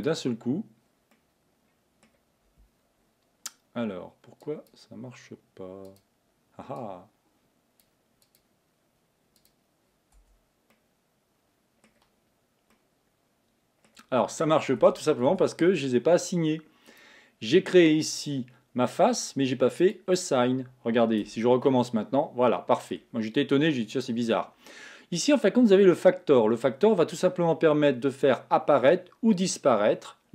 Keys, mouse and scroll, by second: 1.2-4.2 middle drag, 4.4 click, 5.9 click, 6.9-10.3 drag, 10.3 Tab, 10.8-14.9 middle drag, 14.9 Tab, 15.4 Tab, 17.0 click, 20.0 click, 21.3 Tab, 21.7-24.0 middle drag, 24.0 click, 26.1-29.1 drag.